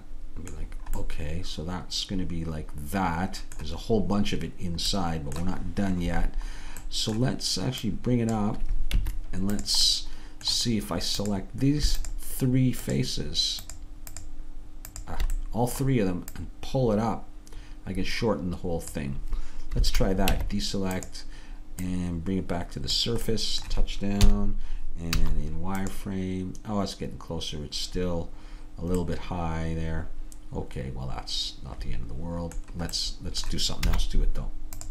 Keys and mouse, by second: 1.7-3.6 middle drag, 5.0 middle click, 7.9-9.0 drag, 9.0 Tab, 12.1 click, 15.5-18.9 middle drag, 19.9 a, 20.3 Tab, 21.9-23.8 drag, 23.8-25.0 middle drag, 24.3 KP_3, 25.2 z, 29.0-30.7 middle drag, 33.9 middle click, 33.9 z.